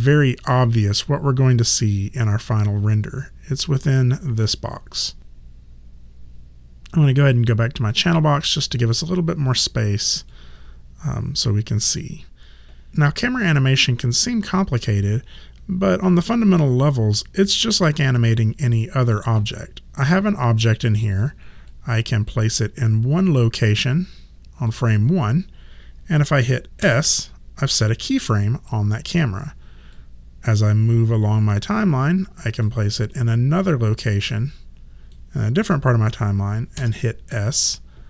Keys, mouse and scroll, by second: 7.8 click, 10.3 click, 21.7 click, 26.8 s, 29.9 click, 33.7 click, 36.8 s.